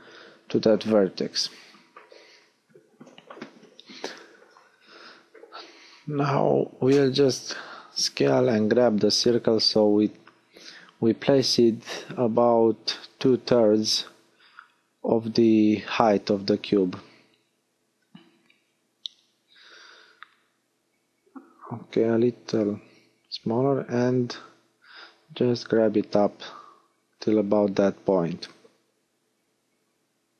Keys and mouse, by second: 0.2 KP_1, 3.0 s, 4.1-5.2 drag, 5.2 s, 10.2 middle click, 11.6 s, 13.4-15.0 drag, 15.4 s, 15.7 click, 18.6 click, 21.0 s, 22.2-24.6 drag, 27.8 middle click, 29.8-30.3 middle drag.